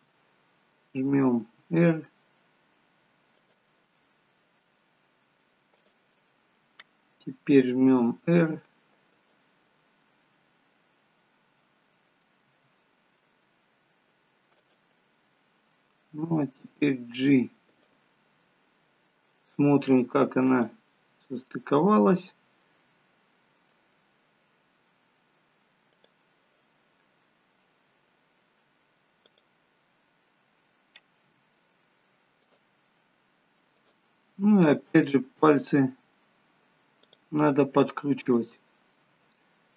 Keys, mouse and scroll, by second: 0.0 shift+click, 1.5 r, 3.8 middle click, 5.0-5.8 scroll down 1, 5.8 click, 6.0 middle click, 7.9 r, 9.7 middle click, 12.4 scroll down 1, 12.6 r, 14.9 middle click, 16.2 g, 18.0 middle click, 19.8 click, 20.5 click, 21.2 middle click, 25.8 click, 27.3-28.9 scroll up 2, 29.1 click, 31.3 g, 33.8 click, 35.0 click, 36.9 click, 37.8-38.3 scroll up 2, 38.3 shift+middle click.